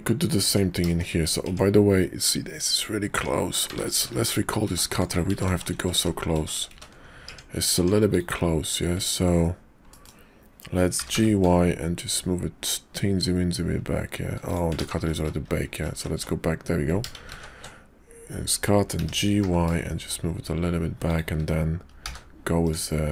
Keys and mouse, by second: 0.4 Tab, 0.8 shift+click, 1.4 Tab, 3.1 Tab, 3.9 ctrl+z, 4.1 ctrl+a, 5.2 ctrl+z, 5.4 ctrl+z, 5.6 ctrl+z, 5.9 ctrl+z, 6.3 ctrl+z, 6.6 ctrl+z, 7.2 Tab, 7.7 Tab, 8.9 `, 9.9 middle click, 10.8 g, 14.8-15.1 ctrl+z, 15.3 ctrl+z, 15.5 ctrl+z, 15.7 ctrl+z, 15.9 ctrl+z, 18.8 ctrl+shift+g, 21.9 t, 22.7 click.